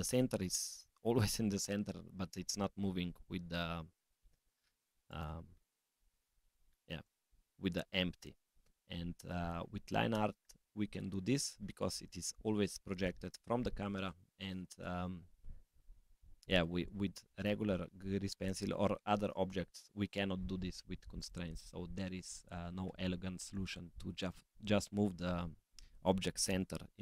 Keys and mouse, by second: 5.8-6.4 middle drag, 6.8 middle click, 21.1 click, 24.1-27.0 drag.